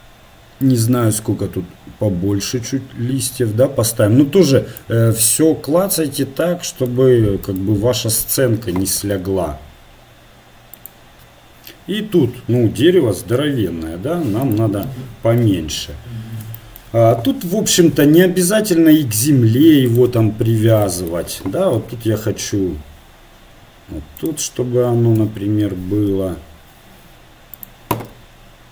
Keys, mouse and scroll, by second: 7.5-9.5 right drag, 9.5 g, 12.8 s, 15.8 KP_1, 18.0 g, 20.7 KP_7, 21.8 g, 25.3 KP_1, 26.2 r, 28.1 s.